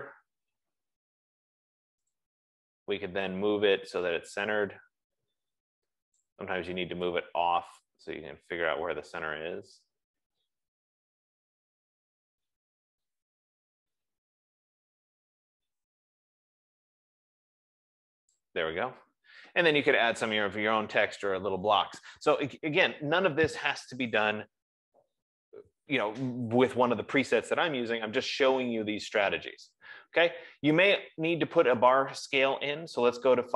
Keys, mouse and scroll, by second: 1.7 click, 2.4 click, 6.6 click, 18.5 click, 20.4 click, 25.4 F15, 32.2 click.